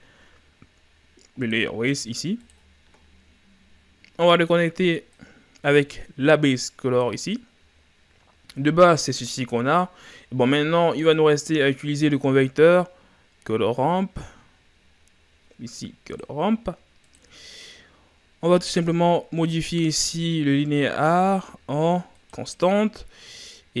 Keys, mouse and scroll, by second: 7.2 click, 22.5-23.5 drag.